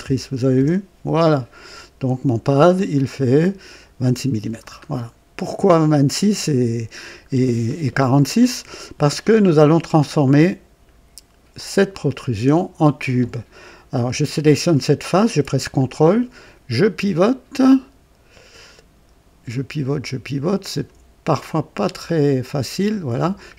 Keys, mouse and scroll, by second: 0.5 KP_Enter, 2.7 click, 4.9 scroll down 1, 7.6-8.4 right drag, 10.2 click, 11.8 click, 15.7-20.9 ctrl+drag, 21.7-23.0 ctrl+right drag.